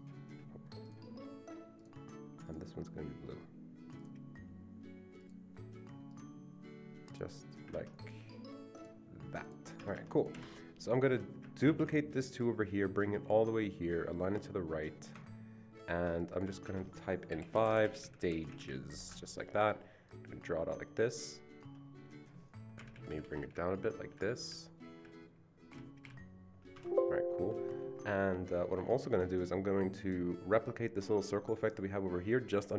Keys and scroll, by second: 7.7 Escape, 9.8 Escape, 10.0 Escape, 10.4 Escape, 11.7 ctrl+d, 16.6 Caps_Lock, 17.3-18.6 typing, 22.8 Down, 22.9 Down, 23.0 Down, 23.2 Down, 23.5 Down, 23.8 Down, 23.9 Down, 24.1 Down, 24.4 Down, 25.0 Down, 25.7 Down, 26.0 Down, 26.7 Escape, 27.4 Escape.